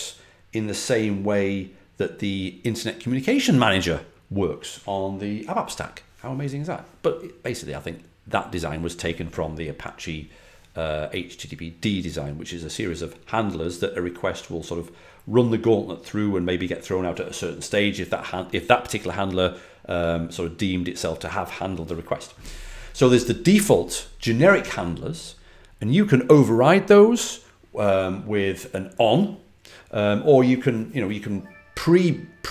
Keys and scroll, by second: 26.7 typing.